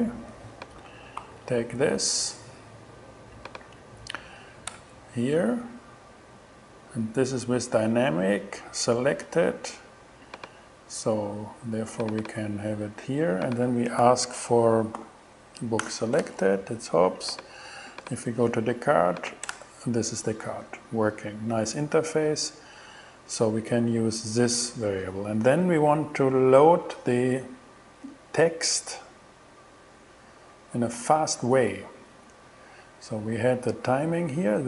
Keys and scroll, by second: 1.2 super+c, 3.6 super+v, 4.8 shift+Return, 14.0 $, 15.0 b, 15.9 Return, 19.5 shift+Return.